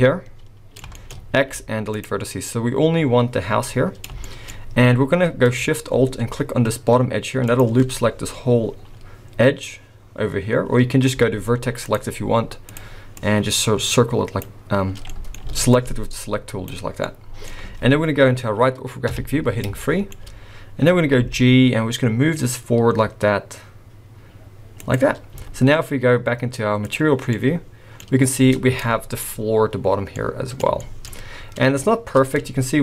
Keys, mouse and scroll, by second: 0.9 shift+middle click, 1.2 scroll up 1, 1.3 x, 3.7 middle click, 4.3 shift+middle click, 4.6-5.6 scroll up 2, 7.5 alt+shift+click, 8.9-10.4 scroll up 1, 10.4 scroll down 1, 10.5-11.2 scroll down 1, 11.2 z, 12.7 click, 13.2 click, 15.1 middle click, 15.4 alt+a, 15.7 click, 17.0 middle click, 19.1 KP_3, 19.8 shift+middle click, 20.1-21.2 shift+scroll up 5, 21.2 g, 25.3 z, 27.4 middle click, 28.6 Tab, 28.7-29.9 scroll down 3, 28.8 middle click, 30.2 middle click, 30.8 shift+middle click, 31.2-32.4 scroll up 3, 32.4 Tab, 32.4 scroll up 1.